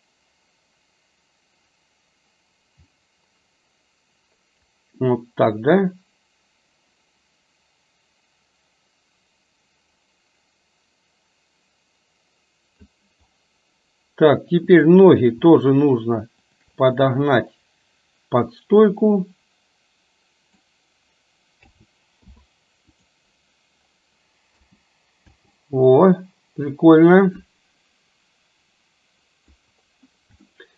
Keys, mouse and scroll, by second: 16.6 shift+click, 17.7-20.8 drag, 21.7 a, 22.3 i, 24.5 space, 25.4 space, 27.1 click, 27.7-29.7 drag, 30.5-30.7 shift+middle drag.